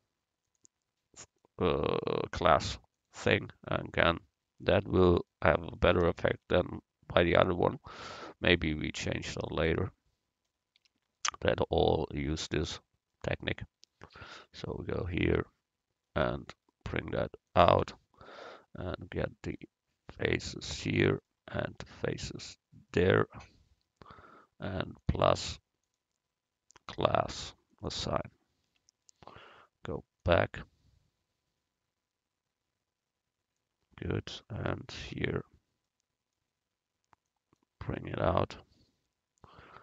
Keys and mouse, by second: 0.5-3.1 drag, 4.0 click, 4.8 Tab, 7.9-9.3 drag, 10.9 a, 14.6 right click, 15.0 Tab, 17.5 click, 18.5-19.7 drag, 18.5 right click, 19.7-20.9 right drag, 20.9-25.0 drag, 25.0-27.1 right drag, 25.1 click, 27.1-28.8 drag, 28.8 Tab, 29.1 click, 30.3-31.9 drag, 34.7 right click, 35.3 Tab, 37.4 click, 38.5 click.